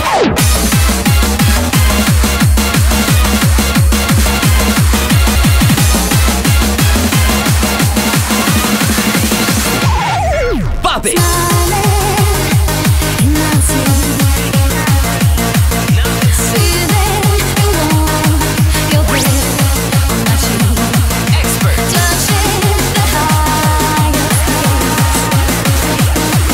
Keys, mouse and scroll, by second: 24.1 middle click.